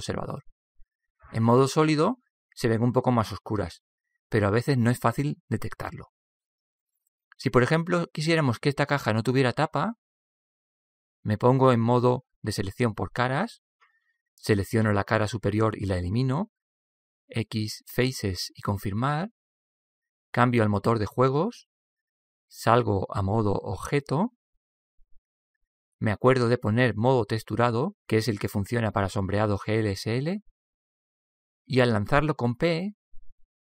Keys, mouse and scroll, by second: 5.0-7.1 middle drag, 12.5-14.5 drag, 15.0-16.9 right drag, 17.1 x, 20.5-23.1 middle drag, 22.3-24.2 drag, 24.6 Tab, 26.9-28.9 drag, 30.7-33.6 middle drag.